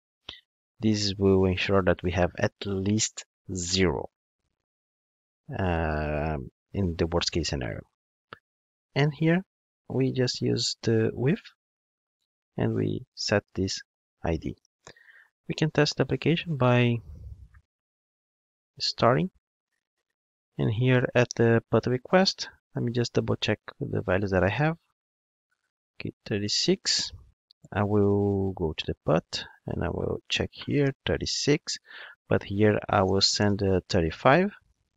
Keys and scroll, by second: 11.5 Return, 13.9 Return, 14.5 Escape, 15.5 ctrl+d.